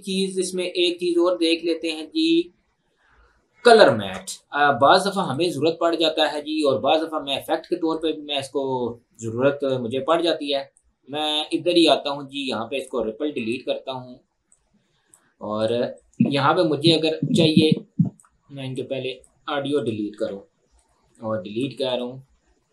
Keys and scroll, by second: 20.3 Up.